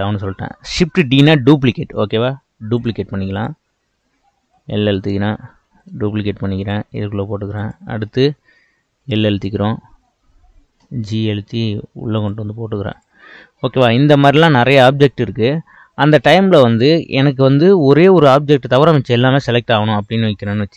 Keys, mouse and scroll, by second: 2.0 shift+d, 3.4 click, 4.5 l, 5.7 shift+d, 7.6 click, 9.0 l, 10.9 g, 12.9 click.